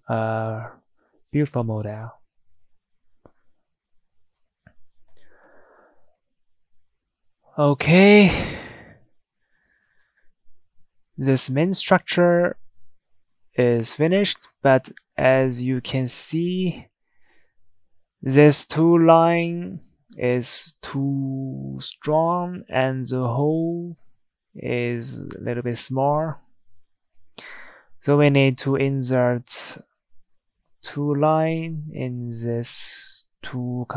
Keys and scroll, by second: 13.9 Tab, 14.6 Tab, 15.8 Tab, 23.8 Tab, 31.4 Escape.